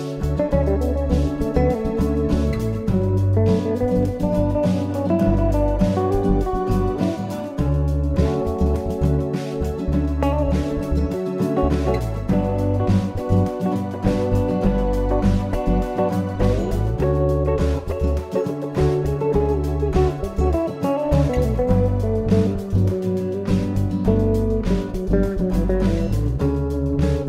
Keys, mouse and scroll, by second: 1.4 ctrl+e, 6.7 z, 9.8 middle click, 11.1-11.7 scroll up 2, 13.9 click, 17.5 click, 22.1 click, 23.8 click.